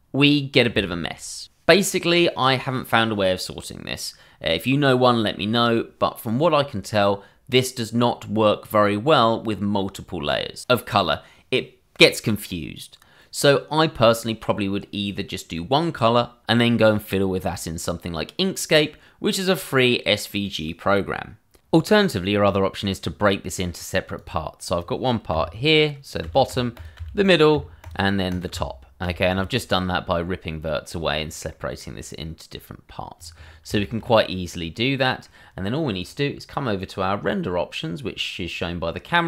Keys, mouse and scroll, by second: 24.1 click, 25.3 f, 26.5 click, 26.8 double click, 26.9 f, 27.8 click, 28.4 double click, 28.5 f, 29.4-30.2 scroll up 1, 30.2 middle click, 31.1-31.5 scroll down 1, 31.5 middle click, 33.2 click, 33.4-33.7 scroll up 1, 33.7 middle click, 33.9 shift+middle click, 35.7-37.7 scroll down 1.